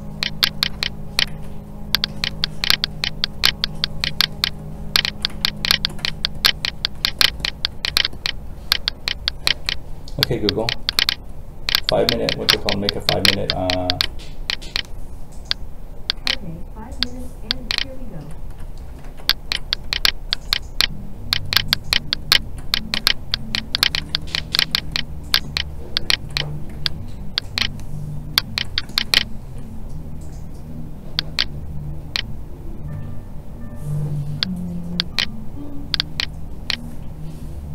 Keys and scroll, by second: 1.2 alt+a, 19.0 ctrl+z, 26.7 alt+a.